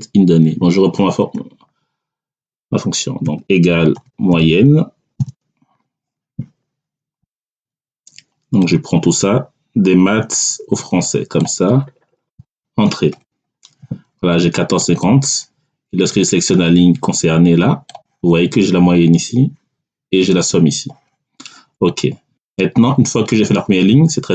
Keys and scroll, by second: 1.2 BackSpace, 3.1 =, 3.8 m, 4.2 o, 5.1 y, 12.3 [, 13.0 Return.